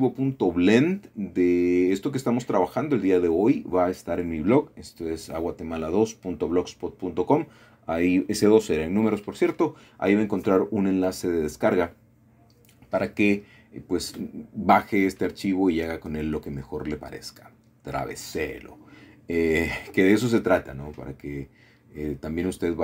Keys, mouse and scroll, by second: 0.2-2.1 middle drag, 5.3 click, 6.3 KP_1, 8.3 g, 11.9 click, 13.3 middle click, 14.7 middle click, 16.9 middle click, 17.5-18.0 scroll down 2, 19.5 middle click, 20.0 click, 20.8 click.